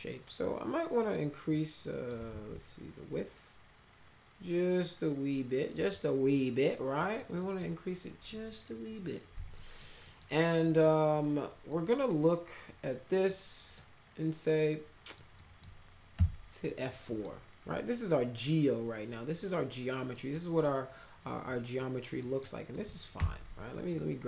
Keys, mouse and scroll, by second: 1.5 click, 2.2 ctrl+z, 3.2-5.7 drag, 6.3 middle click, 7.0 middle click, 7.3 middle click, 9.5 middle click, 10.0 middle click, 10.6 middle click, 11.6-13.2 middle drag, 13.7-15.1 middle drag, 15.4 middle click, 16.1 F4, 17.0 middle click, 20.1 middle click, 22.2 middle click, 22.7 middle click, 23.1 1, 23.7 click.